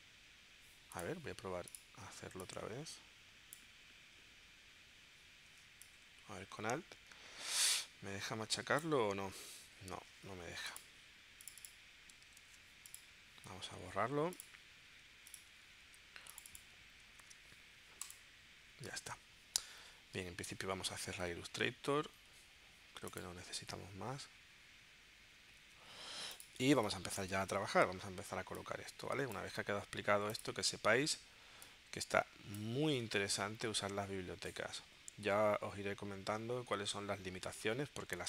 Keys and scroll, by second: 12.4 super+c, 17.3 super+v, 20.4 super+w, 22.0 super+q, 26.7 space, 33.7 shift+Right, 34.6 shift+Left, 37.1 shift+Left.